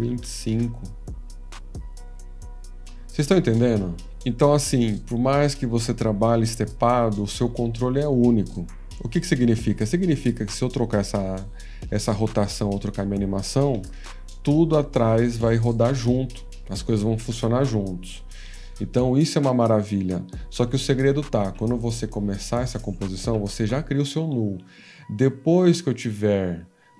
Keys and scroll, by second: 0.0-0.7 typing, 13.7 typing, 13.9 Return, 21.4 ctrl+a, 22.4 F2, 23.2 ctrl+a, 23.9 F2.